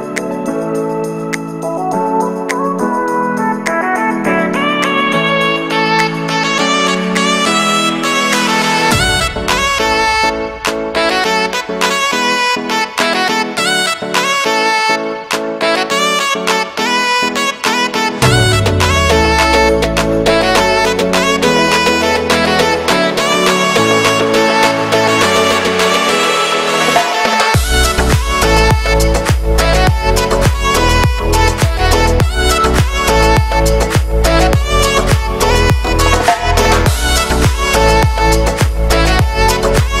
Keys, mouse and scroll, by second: 0.5 shift+middle click, 1.0 scroll up 1, 1.3 middle click, 1.9 right click, 2.4 s, 3.5 g, 3.7 shift+middle click, 4.5 click, 5.1 a, 5.2 a, 5.4 z, 6.4 z, 7.4 middle click, 7.7 alt+shift+right click, 7.9 middle click, 8.2 ctrl+b, 9.5-11.1 shift+middle drag, 11.1 right click, 11.7 click, 12.2 right click, 12.3 shift+d, 13.4 e, 14.4 shift+middle click, 14.8 scroll up 1, 15.1 right click, 15.2 shift+middle click, 15.5-15.9 scroll up 1, 15.9 click, 16.2 right click, 16.4 scroll down 1, 16.5 shift+middle click, 16.7 shift+d, 17.1 s, 18.5 e, 19.3 e, 20.9 shift+middle click, 21.3-21.7 scroll up 1, 21.7 e, 22.7 middle click, 23.3-23.7 scroll up 1, 23.7 right click, 23.9 l, 24.2 g, 25.0-26.3 right drag, 26.3 ctrl+b, 27.7 l, 30.0 alt+e, 32.4 shift+n, 32.8 right click, 33.0 l, 33.4 l, 33.6-34.1 scroll down 1, 34.1 shift+middle click, 34.7 shift+d, 35.7 ctrl+m, 36.2 middle click, 36.7-37.6 scroll up 1, 37.6 shift+n, 38.0 g, 39.3 scroll down 2, 39.4 middle click, 39.9-40.0 scroll up 2.